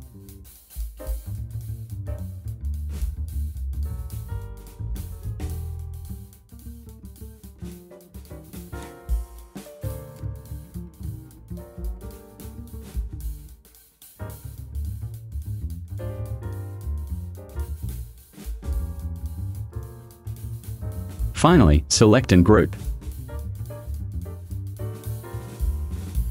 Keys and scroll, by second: 9.9 ctrl+c, 14.5 ctrl+v.